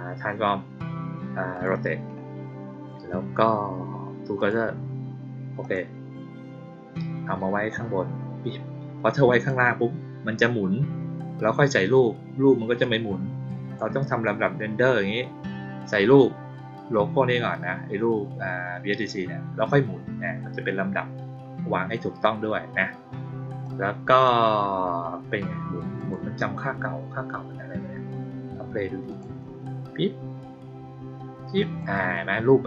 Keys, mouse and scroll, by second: 1.5 click, 4.3 click, 5.5 click, 7.6-9.4 drag, 12.7-13.7 drag, 23.6-24.2 drag, 25.9 click, 29.0 click, 31.5 click.